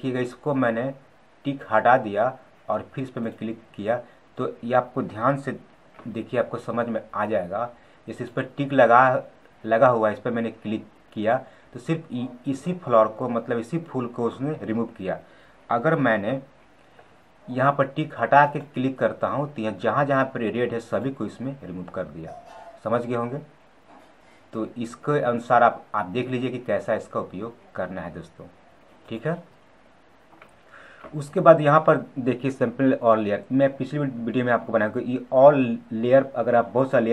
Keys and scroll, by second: 5.6 ctrl+z, 15.9 ctrl+z, 30.7 ctrl+z.